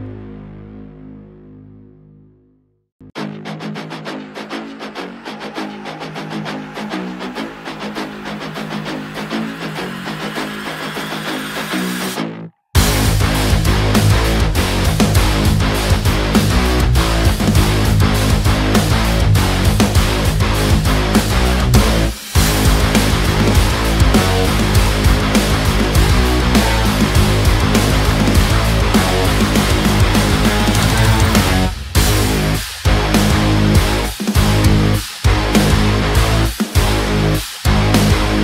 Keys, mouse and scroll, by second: 11.1 click, 14.1 click, 17.3 click, 19.0-22.5 drag, 22.5 click, 25.7-30.6 drag, 33.3 click.